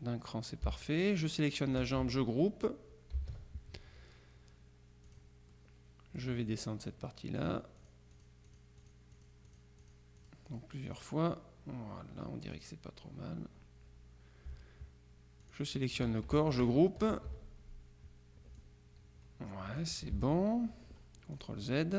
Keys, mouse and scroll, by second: 1.3 shift+click, 3.3 ctrl+g, 5.1 click, 7.5 click, 12.7 click, 15.5 shift+click, 17.2 ctrl+g, 18.7-20.4 drag, 20.3 ctrl+z, 21.5 click.